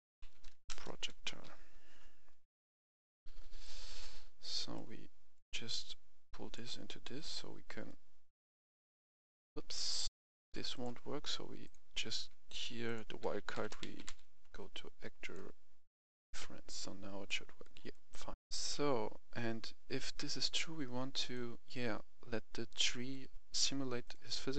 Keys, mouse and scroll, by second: 0.0-1.4 typing, 2.6-5.8 drag, 10.0 F10, 10.7 click, 13.2-14.0 typing, 15.2 click, 17.6 right click, 18.3 F11, 18.3 F10, 21.2 click.